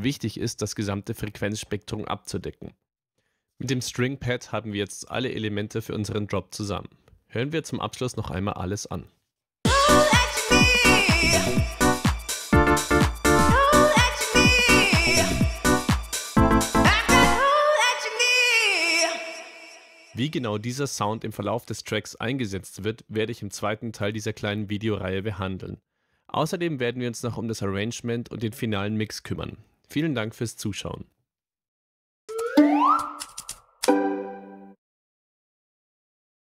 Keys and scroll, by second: 9.6 space, 20.0 space.